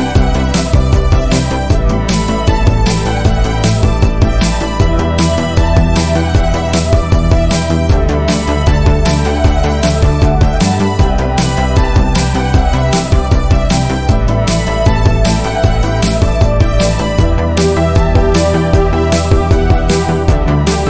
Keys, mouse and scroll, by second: 0.2 scroll up 1, 0.5 shift+middle click, 1.3 r, 5.0 r, 7.1-7.4 scroll down 1, 7.4 middle click, 8.2 KP_3, 8.9 KP_1, 9.6-10.6 shift+middle drag, 10.6-11.9 scroll up 1, 11.9-14.0 drag, 14.4 s, 16.5 alt+click, 17.2 s, 18.0 click, 18.3-18.6 scroll down 2, 18.6-19.7 shift+middle drag, 19.7 click, 20.3 alt+click.